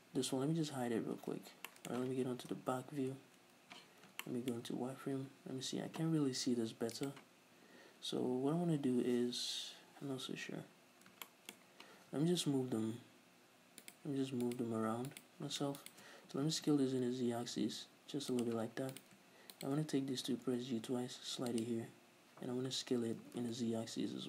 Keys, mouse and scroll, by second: 0.3 l, 1.3 h, 1.8-7.1 middle drag, 3.0 ctrl+KP_1, 3.8 z, 4.7 scroll up 2, 5.0 z, 7.1 right click, 11.3-14.0 shift+middle drag, 12.7 g, 14.0 right click, 14.6 right click, 15.2 right click, 15.9 shift+right click, 16.4 s, 18.5 shift+click, 19.0 right click, 19.6 shift+right click, 20.3 g, 21.7 click, 23.3 s.